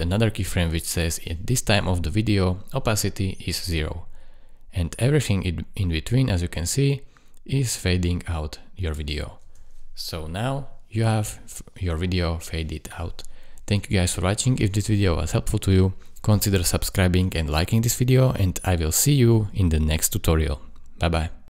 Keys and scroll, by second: 9.4 space.